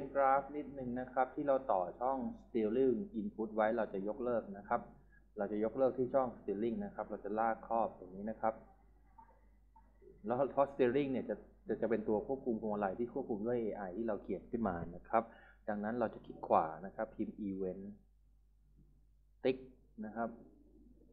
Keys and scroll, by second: 17.1-19.3 typing.